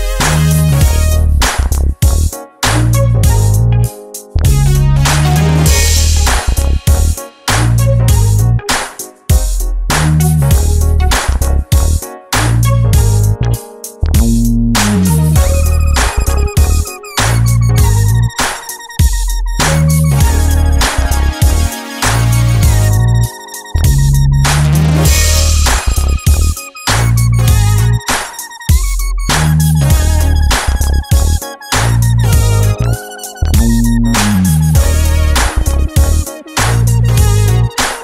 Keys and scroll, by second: 17.5 Escape, 23.6 Escape.